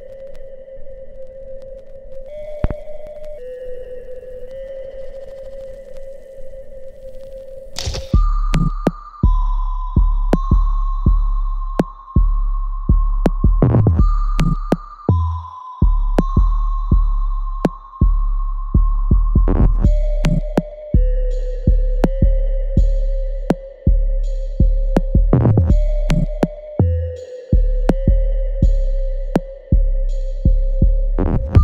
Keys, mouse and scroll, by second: 13.6 click, 17.2 click, 17.6 right click, 18.1 alt+middle click, 18.5-21.2 alt+right drag, 21.2 click, 23.4 alt+right click, 24.5 click, 28.1 right click, 29.4 click, 29.7 alt+right click, 30.9 alt+click.